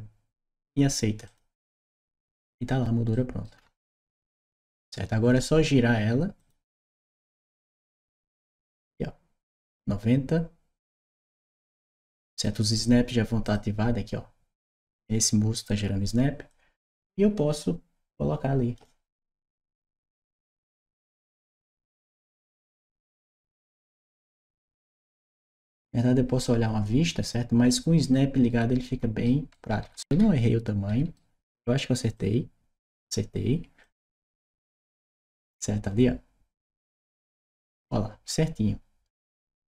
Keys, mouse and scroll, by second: 1.1 shift+click, 2.9 shift+right click, 3.4 shift+middle click, 3.8 shift+right click, 6.2 shift+click, 7.2-12.3 shift+drag, 13.3 shift+click, 16.3-18.6 shift+drag, 18.9-20.2 shift+right drag, 20.8 click, 22.0 click, 23.2 click, 24.3 right click, 25.6-27.5 drag, 27.9-29.0 right drag, 29.3-30.9 right drag, 29.9 d, 31.9 click, 33.6-37.6 drag, 39.4-39.7 right drag, 39.6 w.